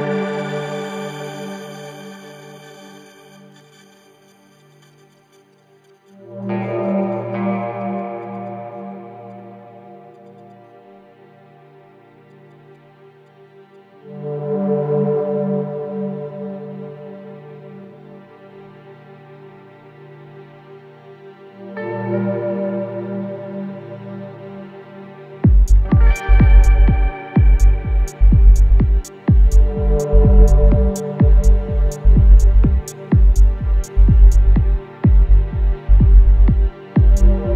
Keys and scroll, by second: 0.6 Delete, 1.8 ], 10.0 Delete, 10.8 ], 12.6 ], 14.1 4, 30.9 4, 31.2 3, 31.8 ], 34.0 5, 34.4 4.